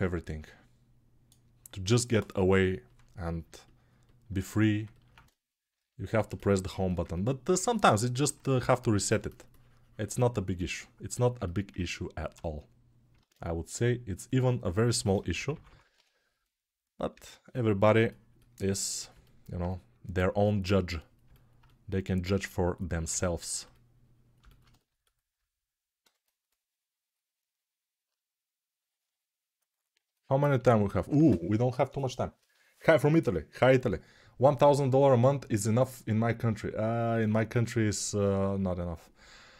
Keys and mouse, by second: 3.7-6.8 ctrl+right drag, 6.8-17.0 ctrl+alt+drag, 13.1 ctrl+Tab, 17.0-24.6 right drag, 24.6-39.5 alt+drag.